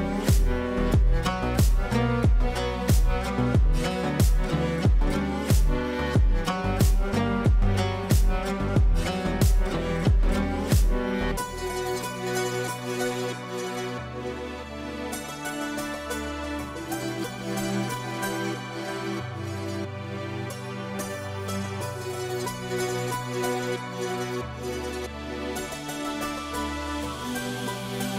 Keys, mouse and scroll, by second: 1.1 typing, 2.2 click, 3.6 F3, 7.3-8.8 click, 8.5 right click, 8.9 click, 10.0 ctrl+a, 10.7-13.6 typing, 14.6 ctrl+space, 15.4 click, 20.8 space, 22.0-25.8 drag.